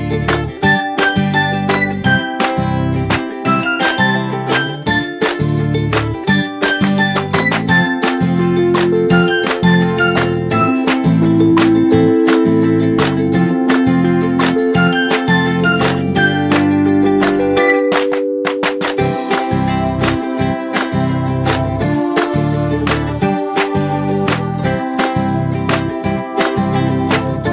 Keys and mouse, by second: 1.5 click, 2.5 m, 4.8 click, 6.4 click, 9.2-12.9 drag, 18.5 click, 20.0 click, 22.1 m, 23.9-25.3 drag.